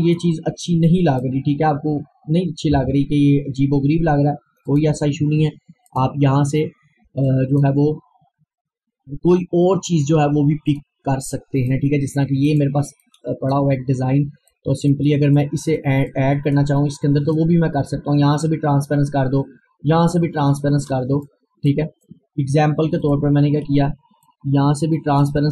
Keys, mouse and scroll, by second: 2.0 scroll down 1, 2.8 Delete, 4.8 click, 8.1-8.7 scroll down 1, 8.7-9.1 scroll up 1, 10.7-17.9 drag, 17.9 scroll up 1, 20.2 click, 21.3-25.5 drag.